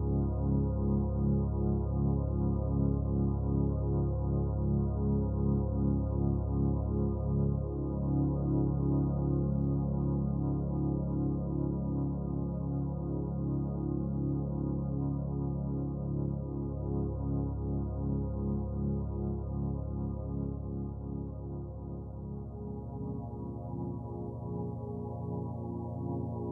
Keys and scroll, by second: 0.8-1.5 typing, 3.6-3.9 typing, 5.8-9.5 typing, 10.6 space, 12.4 space, 17.4 space, 20.7 space, 23.6-24.2 typing.